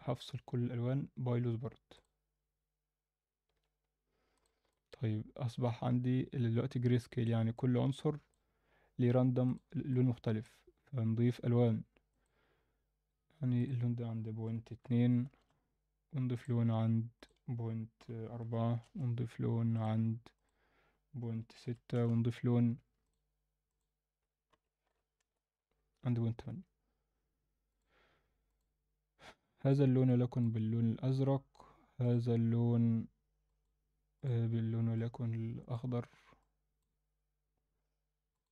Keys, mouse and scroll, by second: 4.3 click, 4.7-7.3 middle drag, 9.5 click, 9.9-10.4 alt+middle drag, 12.1 click, 13.6-15.4 drag, 16.4 click, 17.2-18.9 drag, 19.7 drag, 20.4-22.0 drag, 23.0 click, 23.6-25.3 drag, 27.7 click, 28.5 click, 32.0 click, 33.4 click, 34.2 drag, 38.3 click.